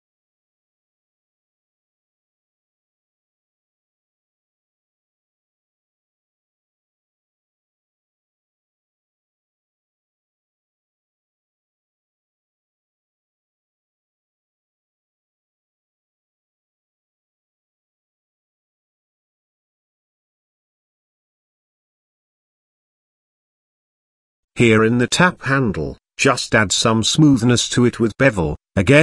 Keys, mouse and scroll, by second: 1.0 shift+middle click, 1.4 middle click, 3.7 click, 4.3 click, 6.5 ctrl+click, 7.7 g, 9.6 middle click, 10.2 shift+middle click, 11.9 click, 12.8 click, 13.4 click, 14.1 click, 14.6 middle click, 15.6 e, 17.3 middle click, 17.9 s, 21.3 click, 22.1 click, 22.8 middle click, 23.5 click, 24.1 middle click, 25.1 shift+middle click, 25.7 ctrl+b.